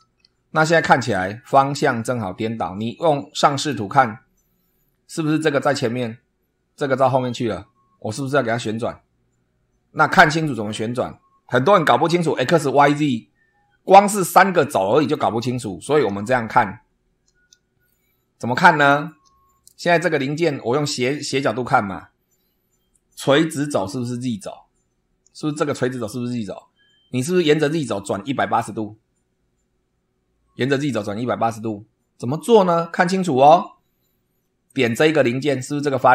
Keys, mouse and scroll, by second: 0.7-1.1 scroll up 2, 1.4 scroll down 2, 3.5 click, 4.2 scroll down 2, 14.9 click, 18.4-19.2 shift+middle drag, 34.6 click.